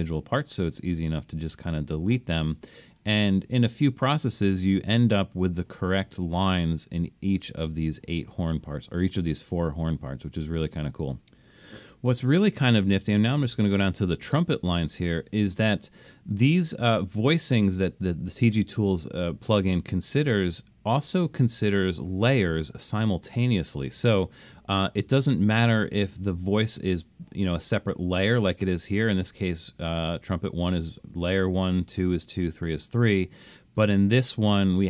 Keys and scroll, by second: 0.0 BackSpace.